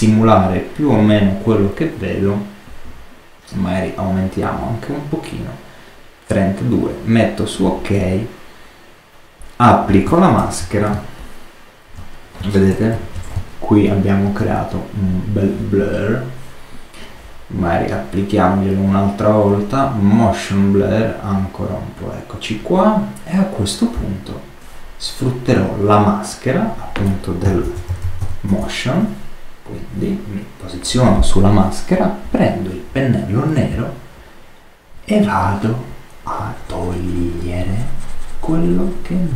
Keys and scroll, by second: 10.3 super++, 10.8 super+space, 12.6 super++, 13.2 super+space.